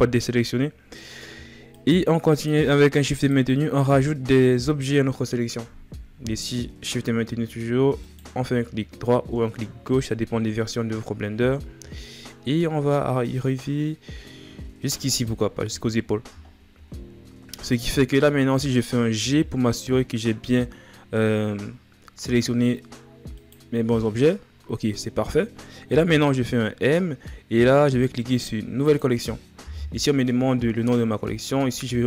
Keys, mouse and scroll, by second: 0.0-0.6 scroll down 3, 1.4-5.8 shift+right drag, 7.8-10.8 shift+right drag, 14.9-15.7 shift+right drag, 15.7-16.2 scroll down 4, 16.6 scroll up 2, 18.1-19.2 scroll down 1, 19.2 g.